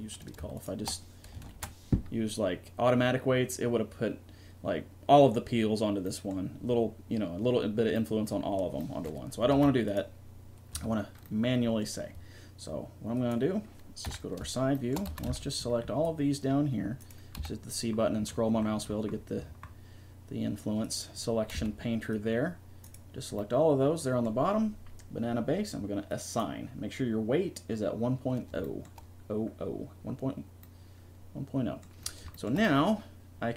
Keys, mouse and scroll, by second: 0.6-2.8 right drag, 1.5 ctrl+p, 9.5 a, 10.7 Tab, 14.0 KP_3, 15.1 a, 15.3 c, 17.3 c, 18.7 click, 20.9-22.8 drag, 21.5 c, 22.8 middle click, 23.1 click, 26.1-28.0 drag, 30.6 middle click, 32.1-33.5 drag.